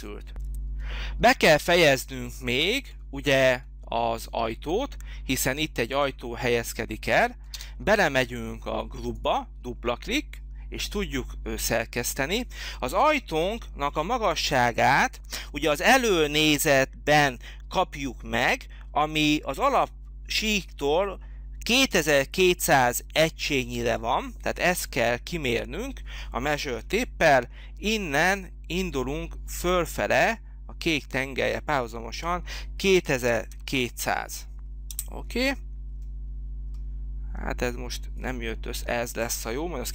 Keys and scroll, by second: 7.4 space, 26.8 t, 32.8 2, 33.4 0, 34.8 Return.